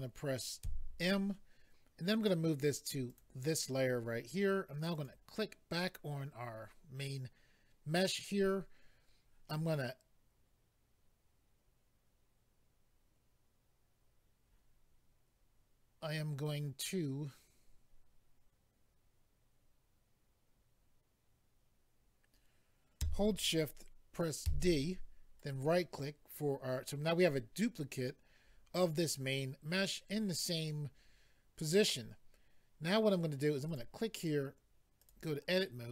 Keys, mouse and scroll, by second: 3.1 click, 3.2 click, 4.9 click, 5.0 click, 25.4 right click, 25.4 d, 33.6 click, 35.0 click.